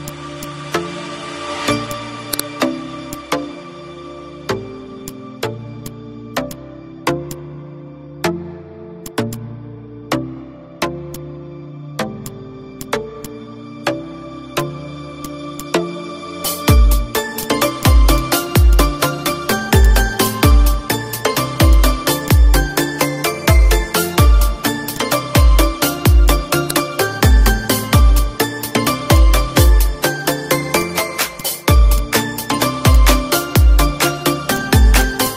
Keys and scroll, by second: 0.6 space, 3.5 Down, 9.2 space, 10.0 F4, 14.1 d, 17.0 ctrl+shift+a, 20.1 z, 28.8 ctrl+z, 30.0 ctrl+d.